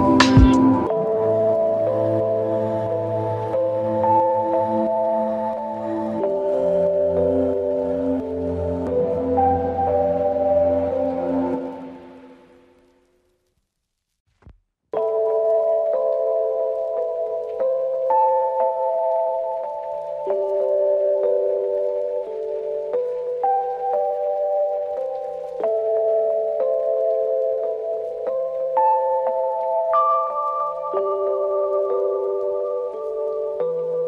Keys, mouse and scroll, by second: 3.5-5.1 typing, 5.2 click, 6.4 click, 9.2 click, 11.8 click, 13.7 click, 15.9-16.6 click, 16.7-17.1 middle click, 17.1-17.7 drag, 19.0-20.2 drag, 22.1-22.5 scroll down 1, 22.8-23.3 scroll up 1, 23.3 click, 30.8-31.7 drag.